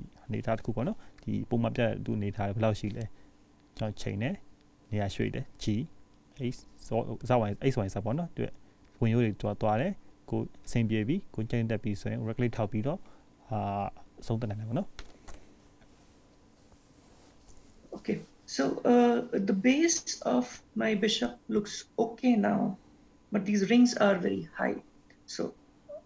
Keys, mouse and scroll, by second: 2.3 scroll up 1, 4.5 click, 6.5 click, 21.6-22.1 scroll down 1, 22.2 scroll down 1, 22.4-24.6 scroll up 2, 25.6-26.0 scroll up 1.